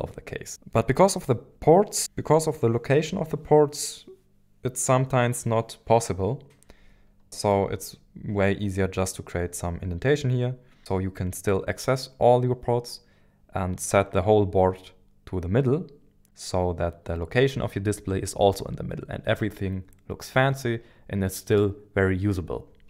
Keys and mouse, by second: 7.2 shift+middle click, 7.9-9.1 middle drag.